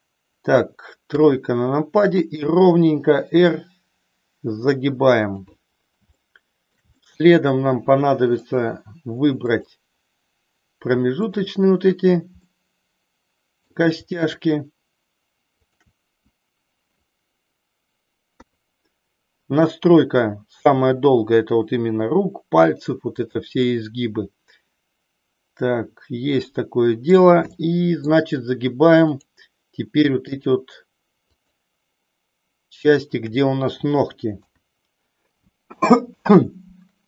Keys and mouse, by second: 1.2 KP_3, 2.5 r, 6.2 shift+middle click, 7.1-8.5 middle drag, 9.4 click, 12.4-13.8 middle drag, 15.5 shift+click, 18.3 KP_3, 20.7 r, 23.3 click, 23.7-27.2 middle drag, 27.4 middle click, 28.9 click, 30.3 shift+click, 31.2 shift+click, 32.9 shift+click, 34.3 KP_3.